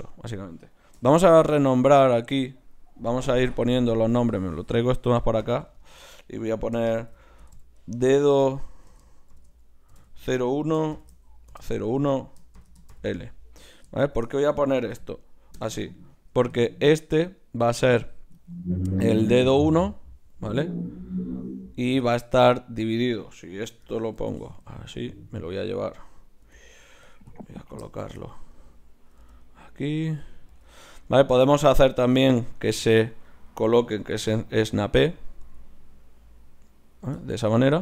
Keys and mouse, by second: 1.0 n, 1.9-4.2 drag, 16.8-18.0 middle drag, 18.1-24.1 middle drag, 25.0-26.5 middle drag, 26.5 g, 28.6-29.8 drag, 29.2 g, 30.5 g, 33.9-35.1 right drag, 34.1 g, 35.3-37.0 drag, 35.4 g.